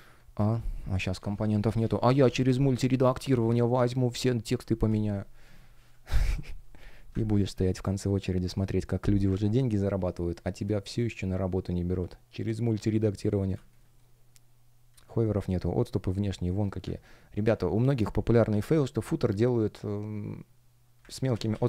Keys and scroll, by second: 6.5 Escape, 7.7 space, 8.7 shift+o, 9.9 space, 10.7 shift+g, 13.4 space, 15.0 shift+p, 17.3 super+z, 21.0 super+z.